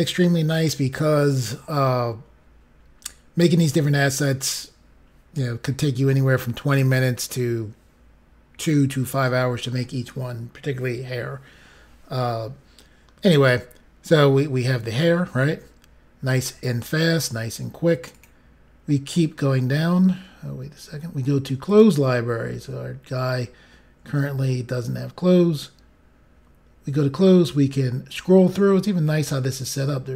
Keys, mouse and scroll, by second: 14.3 scroll up 4, 15.1-16.2 scroll up 1, 18.1 click, 18.8-19.2 scroll down 5, 21.6 click, 22.5-23.2 scroll down 4, 23.9 scroll down 1, 24.7 scroll down 1, 24.9 scroll up 1, 27.0 scroll down 5, 29.2-30.1 scroll down 2.